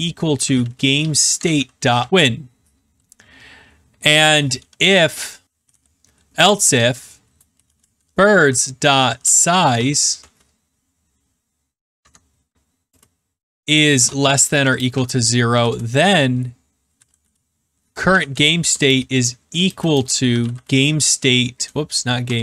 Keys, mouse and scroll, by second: 0.0-2.5 typing, 2.2 middle click, 2.2 middle click, 4.5 Down, 5.2-6.1 typing, 7.2-10.6 typing, 11.9 Tab, 14.6-15.4 typing, 15.6 Return, 16.6-22.4 typing, 21.1 Tab.